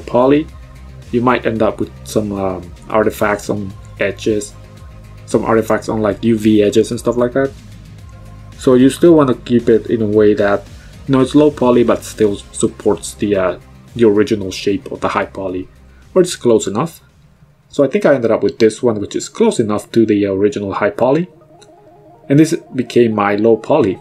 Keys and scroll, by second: 7.6 KP_Decimal, 8.0 KP_4, 8.1 Return, 14.3 KP_Decimal, 14.6 KP_3, 14.8 Return.